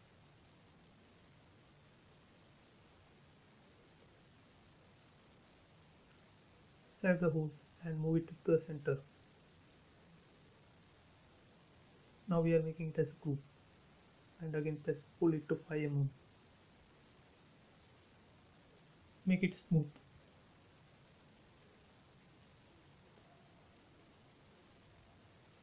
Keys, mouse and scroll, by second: 0.5 shift+click, 1.8 Delete, 2.2 scroll down 1, 3.0-4.2 scroll down 1, 4.3 shift+middle click, 4.8-5.6 shift+scroll up 1, 5.6 shift+click, 7.3 shift+scroll up 1, 7.8 shift+middle click, 8.5-9.4 scroll up 1, 9.4 m, 10.1 click, 10.9 space, 11.6 right click, 12.6 click, 14.4 click, 16.7-17.6 typing, 17.4 Return, 18.5 scroll down 1, 19.8 shift+middle click, 20.9 click, 21.3 right click, 22.0 click, 22.4-22.7 scroll down 2, 22.5 space, 23.6 click, 24.3 space, 25.3 click.